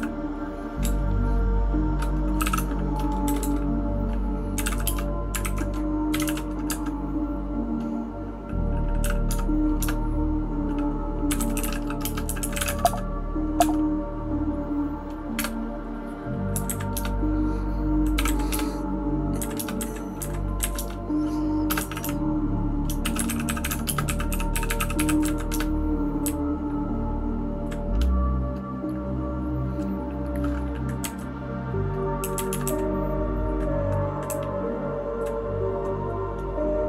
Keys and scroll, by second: 16.6 Down, 16.9 Return, 18.2 Down, 18.2 Return, 18.5 Return, 19.4 Down, 19.6 Return, 19.8 Down, 20.6 Up, 20.9 Return, 21.7 space, 21.8 e, 21.8 e, 22.0 e, 25.2-27.9 typing, 31.0 Down, 32.2 Down, 32.3 Down, 32.5 Down, 32.6 Down, 34.2-35.2 Down.